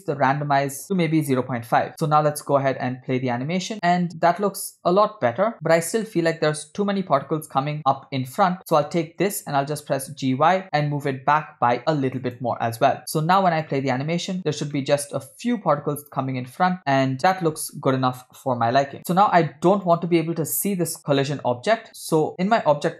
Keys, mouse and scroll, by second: 0.8 click, 2.0 click, 2.3 space, 5.5 scroll up 3, 5.7 space, 6.1-7.0 middle drag, 8.6 click, 9.7 g, 13.0 click, 13.1 space, 14.7-15.2 middle drag, 16.5-17.0 middle drag, 19.0 space, 19.9 drag.